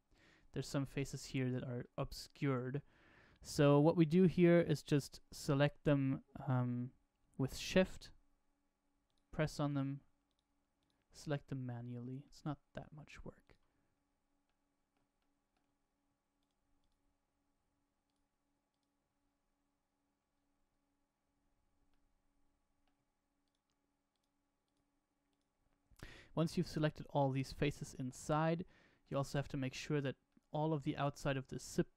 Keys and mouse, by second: 0.6 shift+middle click, 1.8 shift+middle click, 9.0 shift+click, 10.2 shift+click, 10.7 shift+click, 11.4 middle click, 12.2 shift+middle click, 13.4 shift+click, 14.4 middle click, 15.1 shift+middle click, 16.3 shift+click, 16.7 shift+click, 18.0 shift+click, 18.6 shift+click, 21.8 middle click, 23.4 shift+click, 24.0 shift+click, 24.6 shift+click, 25.2 shift+click, 28.0 shift+middle click, 28.6 middle click, 30.2 shift+middle click.